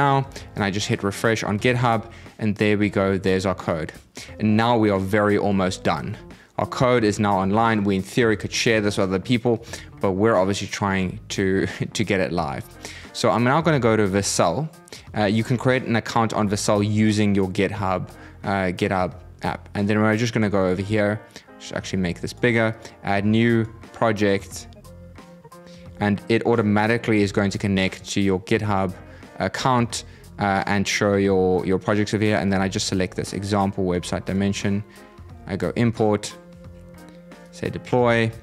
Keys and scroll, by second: 0.0 super+r.